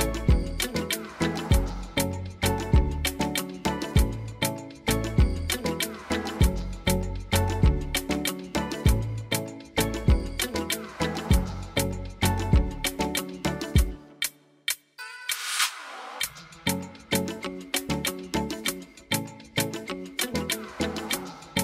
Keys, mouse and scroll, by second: 1.7 click, 2.7-3.9 drag, 4.4 click, 17.3 click.